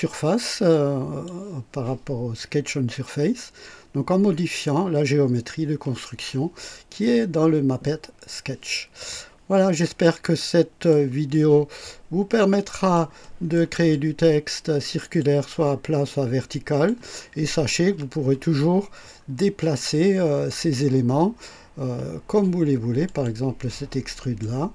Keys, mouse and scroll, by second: 0.6-1.4 drag, 9.5-10.1 drag, 10.3-11.0 right drag, 11.2-13.0 drag, 13.1 right click, 13.8-15.3 drag, 16.0 click, 18.8 scroll down 2, 23.0 click, 24.1 right click.